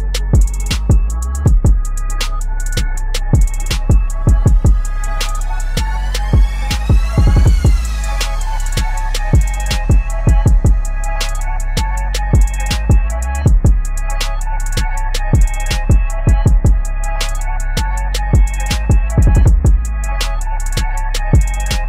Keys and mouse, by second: 0.1 click, 2.0 v, 2.3-4.3 drag, 7.5-8.5 typing, 9.8-10.5 typing, 10.9 click, 11.0-14.4 drag, 16.7 shift+s, 17.2 w, 19.1-21.8 drag.